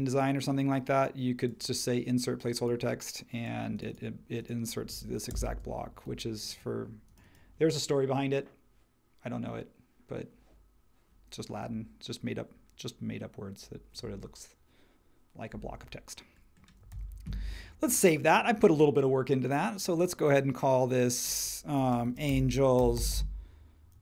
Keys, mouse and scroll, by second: 5.3 shift+click, 16.9 super+s, 21.8-24.0 typing.